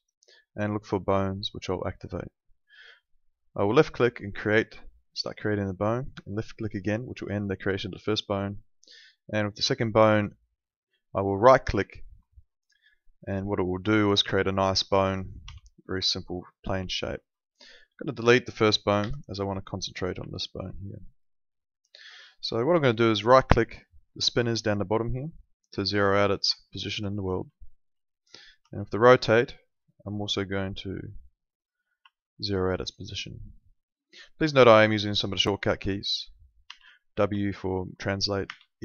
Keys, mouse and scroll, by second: 6.4 click, 11.3 right click, 12.1 alt+middle click, 15.4 w, 16.5 middle click, 18.1 click, 19.0 Delete, 19.8 click, 20.3 alt+middle click, 24.5 right click, 26.5 alt+middle click, 27.5 alt+middle click, 28.5 e, 31.5 right click, 32.1 alt+middle click, 34.8 alt+middle click, 36.7 w, 38.4 e.